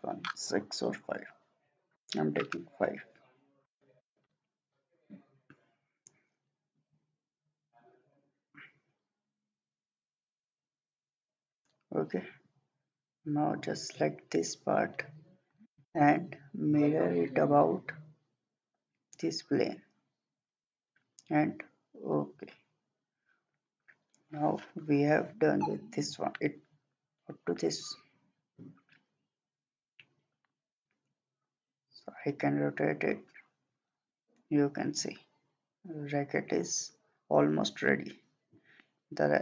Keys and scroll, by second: 2.0 5, 3.0 Return.